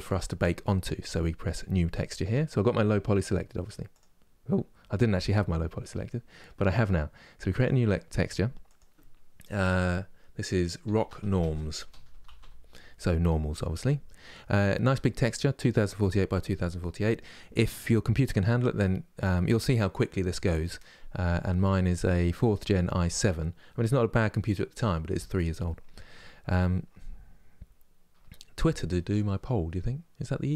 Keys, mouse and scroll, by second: 3.7 click.